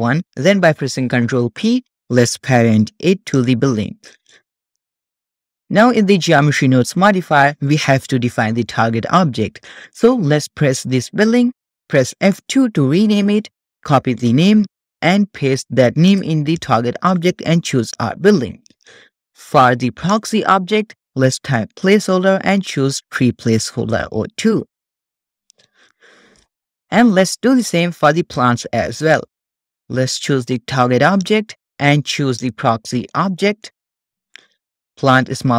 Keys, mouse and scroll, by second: 1.4 ctrl+p, 4.1-4.7 shift+middle drag, 4.7 click, 7.1 click, 9.9 click, 12.2 F2, 15.0 click, 16.1-18.1 drag, 19.1-19.8 scroll down 1, 20.1-24.1 drag, 24.6-26.3 scroll down 2, 26.3 scroll down 1, 26.4 shift+middle click, 27.5 click, 28.3 click, 29.1-31.3 drag, 32.3-35.5 drag.